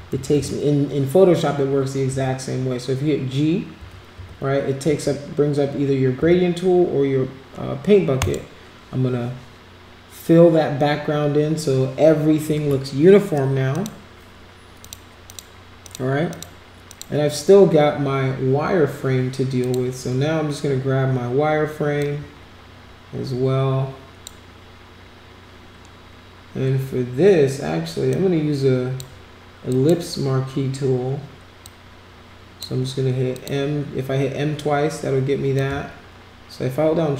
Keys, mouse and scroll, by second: 0.1 g, 0.3 g, 2.1 g, 3.8 g, 4.1 g, 4.8 g, 6.2 g, 8.2 click, 13.7 click, 14.8 click, 15.3 click, 15.8 click, 16.3 click, 16.9 click, 19.6 click, 22.0 click, 28.1-29.0 drag, 29.7 click, 31.6-32.6 drag, 33.3 click, 35.6-37.1 shift+drag.